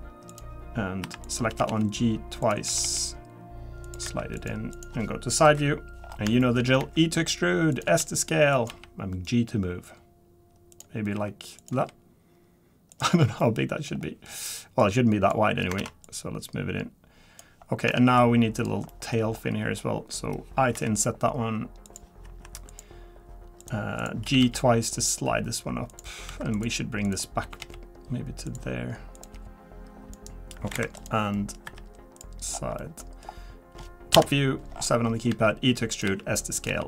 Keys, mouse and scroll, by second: 0.3 click, 1.0 1, 1.2 click, 1.5 g, 1.7 g, 2.4 click, 2.6 g, 4.0 3, 4.3 click, 4.7 click, 5.4 KP_3, 6.0 scroll down 4, 6.4 shift+middle click, 6.8 e, 7.8 s, 8.7 g, 11.1 r, 11.7 g, 13.2 scroll down 2, 13.4 middle click, 13.9-14.8 scroll up 3, 14.8 click, 15.8 ctrl+z, 16.0 click, 17.7 scroll down 2, 17.9 shift+middle click, 18.6 click, 18.9 middle click, 19.3-19.8 scroll up 4, 20.7 scroll up 3, 20.7 i, 22.2 1, 22.7 click, 23.6 click, 24.2 g, 26.3 2, 26.5 click, 27.0 click, 27.4 g, 29.1 click, 29.3 g, 30.7 Escape, 31.0 click, 31.3 scroll up 1, 31.3 middle click, 31.7 3, 32.1 click, 32.5 scroll down 5, 32.8 middle click, 33.0-34.1 scroll up 2, 34.1 KP_7, 34.7-35.1 scroll down 3, 35.3 e, 36.0 s, 36.7 g.